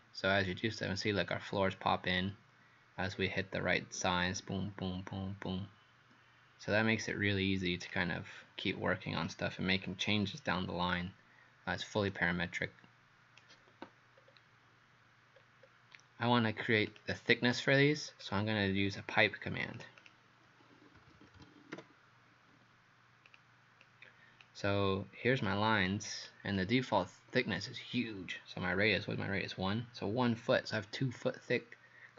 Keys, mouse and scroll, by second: 8.6 scroll down 2, 9.5-10.2 scroll up 4, 12.1 right click, 14.2-15.4 scroll down 2, 15.4-16.0 scroll up 2, 16.9 click, 18.1-18.7 scroll down 2, 18.7-19.4 scroll up 4, 19.8 click, 20.0 click, 20.8-22.3 typing, 23.3 click, 23.8 click, 25.5 click.